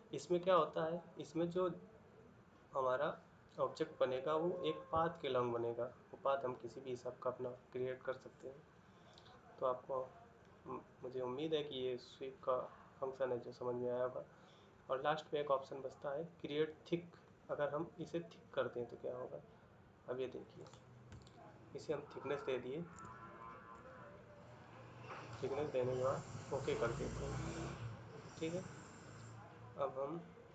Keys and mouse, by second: 21.2 ctrl+middle click, 22.8 shift+middle click, 23.6 middle click, 27.4 ctrl+middle click.